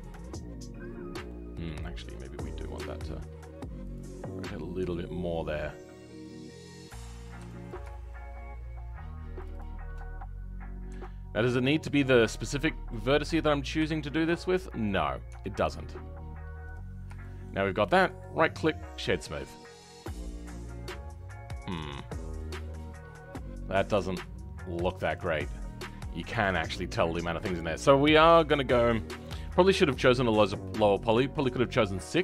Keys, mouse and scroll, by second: 1.2-2.7 shift+middle drag, 2.7 g, 7.0-7.7 scroll up 2, 7.7 ctrl+click, 7.9-9.4 shift+middle drag, 9.5-13.3 shift+drag, 13.3-13.8 scroll down 10, 13.8 right click, 13.8 shift+middle click, 14.2 scroll up 3, 14.5 right click, 14.5 middle click, 15.2 Tab, 16.6 click, 17.2-19.0 shift+middle drag, 19.0 right click, 19.3-19.9 scroll down 3, 19.9 scroll up 4, 20.1-23.2 middle drag, 25.3 scroll down 2, 25.5 middle click, 26.2-26.6 scroll up 2, 26.6 middle click, 27.1 Tab.